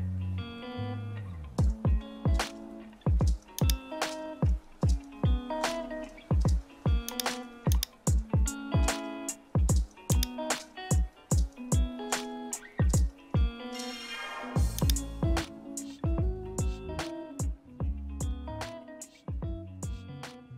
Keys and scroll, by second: 0.6 super++, 8.3 super+h, 8.5 super+t, 17.0 super+h, 17.9 super+-, 18.2 super+-.